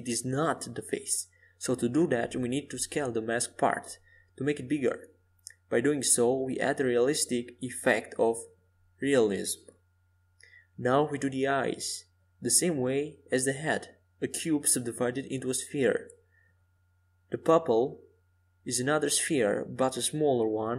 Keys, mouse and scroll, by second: 0.1 KP_5, 0.7 KP_1, 2.0 KP_3, 6.7 shift+a, 12.8-15.1 drag, 14.1 Tab, 16.8 w, 19.4 s.